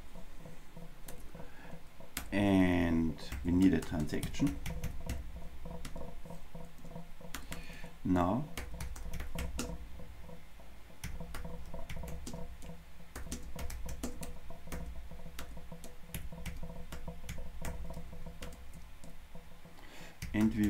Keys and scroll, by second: 3.6 shift+super+Return, 5.9 Return.